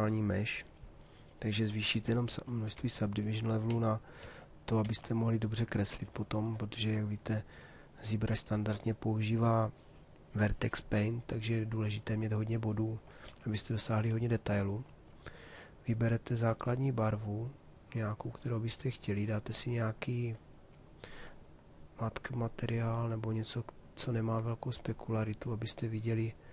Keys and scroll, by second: 1.5 d, 4.3 ctrl+d, 12.9 shift+f, 13.5 shift+f.